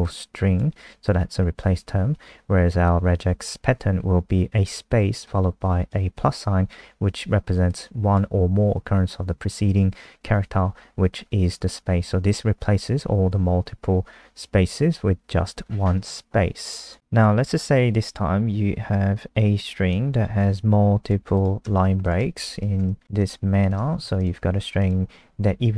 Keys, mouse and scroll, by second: 16.0 super+2, 16.8 click, 17.5-20.4 scroll down 4, 20.4 ctrl+c, 21.0 click, 21.3 click, 22.0 shift+click, 23.2 click, 23.6 Return, 24.2 click, 24.4 ctrl+s, 24.8 click.